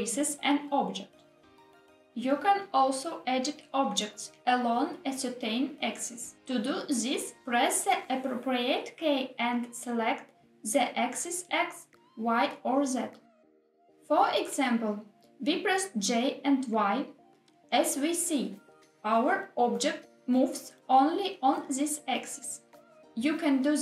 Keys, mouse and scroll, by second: 0.7 ctrl+z, 10.5 g, 11.7 x, 15.3 click, 16.5 ctrl+z, 19.2 g, 19.8 y, 21.8 click, 22.7 ctrl+z, 23.7 g.